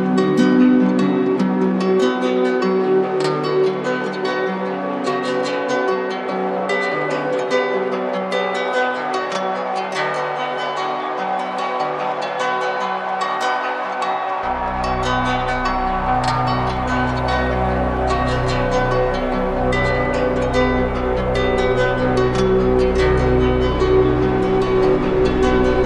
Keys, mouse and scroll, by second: 1.2 click, 7.4 click, 7.6 ctrl+z, 10.6 click, 10.8 ctrl+z, 20.6 click.